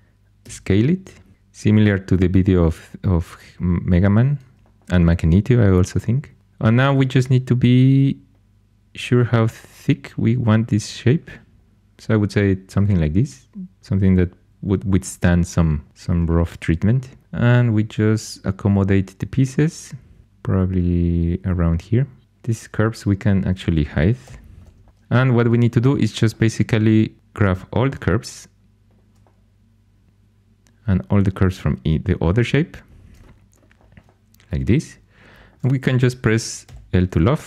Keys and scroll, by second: 0.4 s, 17.1 g, 22.2 2, 24.2 h, 25.3 2, 36.6 l.